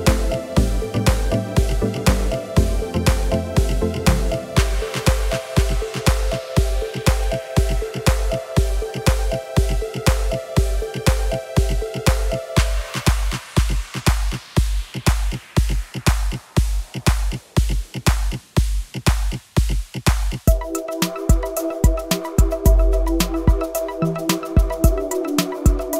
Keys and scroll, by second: 20.1 e.